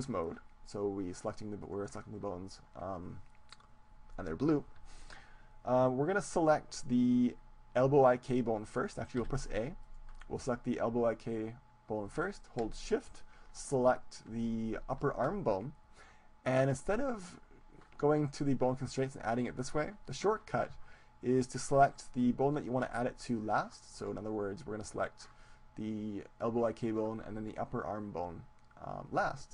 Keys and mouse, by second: 0.8 right click, 1.6 middle click, 1.6-3.5 right drag, 9.3 a, 10.2-11.7 right drag, 15.0-17.0 right drag, 18.6-21.2 drag, 21.4-24.5 right drag.